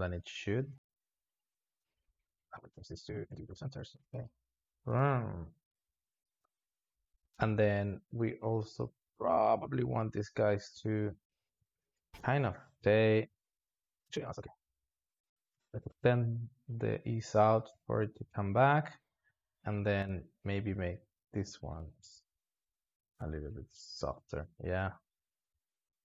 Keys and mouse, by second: 1.3 click, 1.5 s, 3.9-5.4 drag, 5.4 space, 6.2 alt+shift+z, 7.0 space, 7.7-9.1 drag, 9.1 alt+shift+z, 9.8 click, 11.9-14.0 drag, 14.3-15.3 drag, 15.4 s, 16.3-22.1 drag, 22.1 space, 25.8 alt+shift+z.